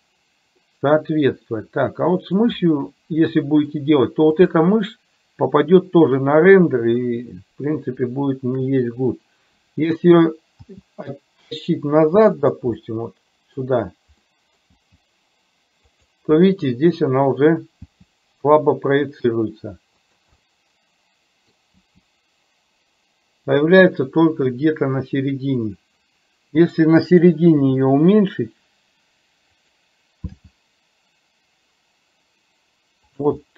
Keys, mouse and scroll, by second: 0.7-2.5 middle drag, 3.5 middle click, 4.4 click, 8.1-8.7 shift+middle drag, 10.7 g, 13.0-13.7 middle drag, 14.4 middle click, 14.9 g, 20.5-21.6 middle drag, 21.9 g, 27.7 s, 30.4 g.